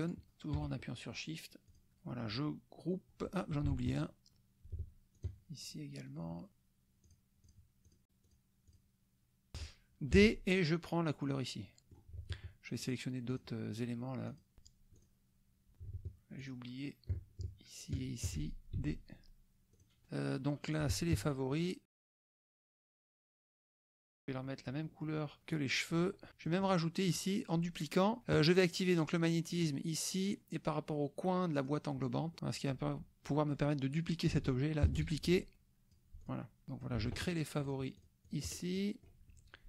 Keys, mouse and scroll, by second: 0.0 shift+click, 1.7 click, 3.9 shift+click, 4.3 click, 5.3 shift+click, 5.7 shift+click, 6.5 shift+click, 7.1 shift+click, 7.9 shift+click, 8.2 shift+click, 8.8 shift+click, 10.2 d, 11.2 click, 11.8 click, 12.8 shift+click, 13.3 shift+click, 14.3 shift+click, 14.6 shift+d, 14.9 click, 15.7 click, 16.4 shift+click, 18.0 shift+click, 18.8 shift+d, 19.7 click, 20.8 shift+click, 21.1 shift+click, 21.7 shift+click, 24.0-25.2 shift+drag, 25.4 d, 25.5 click, 26.3 click, 27.1 click, 29.5 click, 31.6 click, 32.3 click, 33.2-34.3 drag, 35.0 ctrl+d, 35.2 ctrl+click, 36.3 click, 36.7 shift+click, 37.7 shift+click, 38.0 shift+click, 38.7 shift+click.